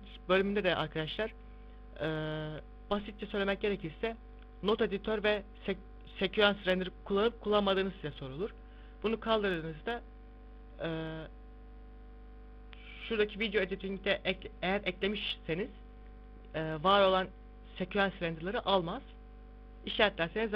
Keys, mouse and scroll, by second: 2.8 click, 3.5 click, 4.0 click, 4.6 click, 8.8 click, 10.6 click, 19.2 click, 20.2 click.